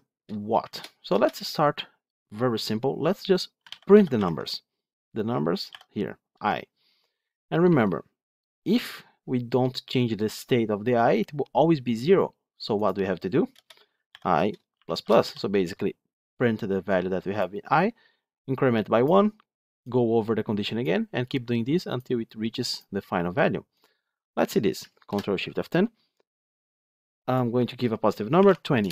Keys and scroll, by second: 4.2 Tab, 6.2 Escape, 25.0 ctrl+shift+F10.